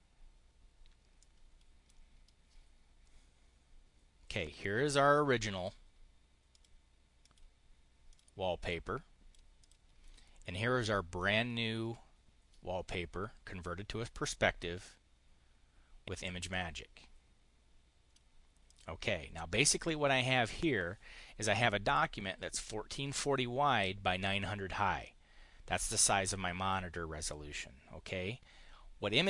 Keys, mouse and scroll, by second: 1.1 click, 4.2-5.5 drag, 6.4 click, 7.0 click, 7.9 click, 8.5 click, 9.4 click, 11.0 click, 16.3-18.0 drag, 18.5 click, 19.4 click.